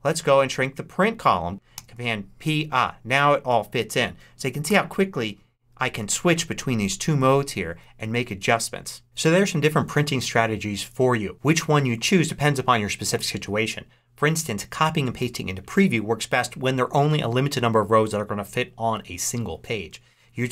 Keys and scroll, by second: 1.6 super+p, 4.6 super+., 6.0 super+p, 7.0 super+..